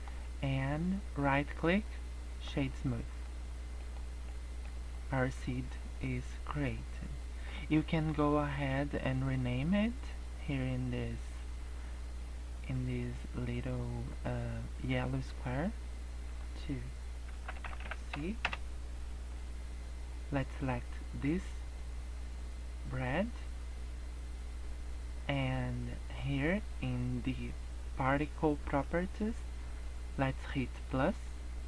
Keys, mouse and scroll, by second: 0.0 scroll up 2, 1.1 right click, 2.6 scroll down 3, 2.8 middle click, 3.8 middle click, 4.1 scroll down 2, 4.2 middle click, 4.8-5.4 scroll up 2, 7.2 middle click, 15.2 click, 16.2 click, 17.6 e, 21.2 click, 28.8 click, 30.7 click.